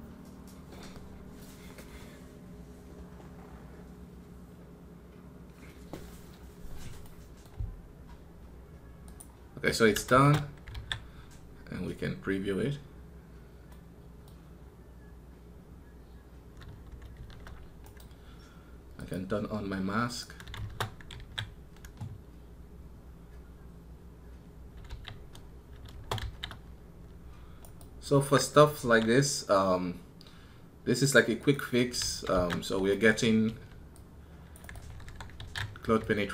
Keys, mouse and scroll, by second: 17.7 right click, 27.4 right click.